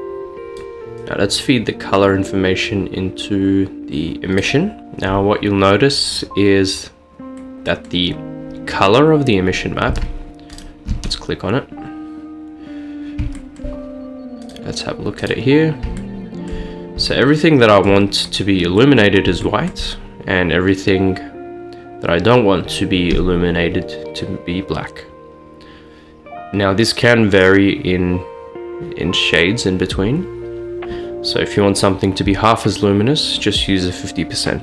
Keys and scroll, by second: 0.9 ctrl+z.